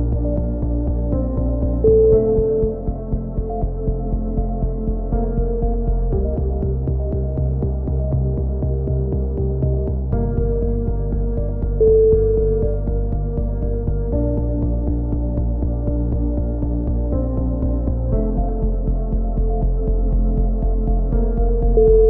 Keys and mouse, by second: 0.0-1.1 typing, 2.4 a, 2.6 a, 3.2 KP_7, 3.7 z, 3.9-5.6 right drag, 5.6 ctrl+l, 6.3 click, 10.2 z, 10.8 a, 11.2-13.3 right drag, 13.0 x, 14.7 click, 16.0 click, 16.5-17.7 middle drag, 17.1 click, 17.7 KP_7, 18.2-20.1 middle drag, 19.7 z, 20.1 click.